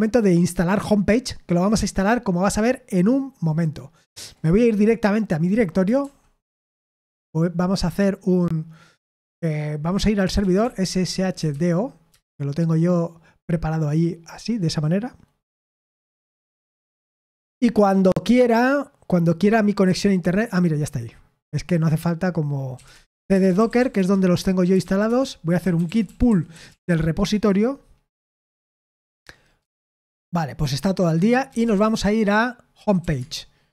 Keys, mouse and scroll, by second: 4.4 click, 6.0 ctrl+l, 10.1-12.0 typing, 12.1 Return, 22.4-27.2 typing, 29.5 Return, 31.2-33.4 typing, 33.6 Return.